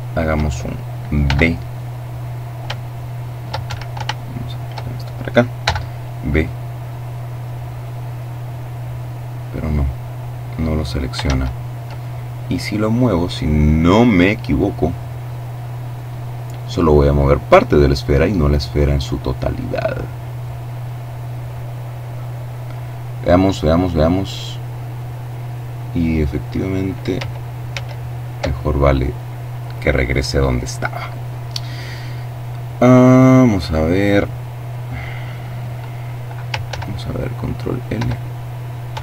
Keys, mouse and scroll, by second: 0.1 b, 1.6-2.7 shift+middle drag, 2.5 shift+Escape, 3.0 shift+middle click, 4.5 b, 5.3-7.1 drag, 8.3-10.3 drag, 10.1 ctrl+z, 11.8-14.2 drag, 18.3-18.9 scroll down 2, 26.7 ctrl+z, 31.5-32.0 scroll up 2, 35.5 ctrl+l, 36.7 l, 38.1 l, 38.5 l.